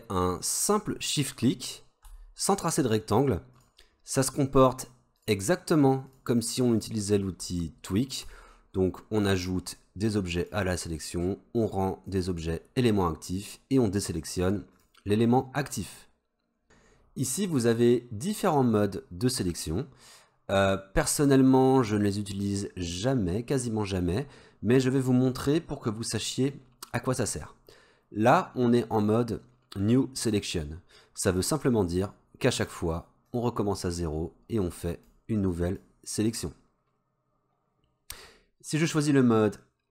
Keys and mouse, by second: 3.6 shift+click, 4.3 shift+click, 5.2 shift+click, 6.1 shift+click, 12.2-16.6 shift+drag, 32.1-32.6 drag, 33.5-33.9 drag, 34.7-35.2 drag, 35.5 drag.